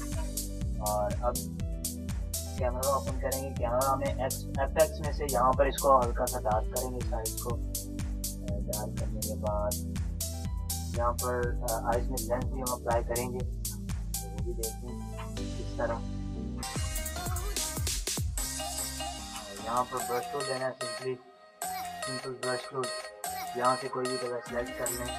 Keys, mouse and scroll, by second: 0.5 ctrl+shift+a, 3.4-12.9 drag, 12.9 Return, 14.6 ctrl++, 15.0 ctrl+space, 15.1 click, 15.3 ctrl++, 15.9 click, 16.1 ctrl++, 17.1 ctrl+space, 17.3 click, 19.9-22.4 typing, 23.8 click, 24.6-25.1 typing.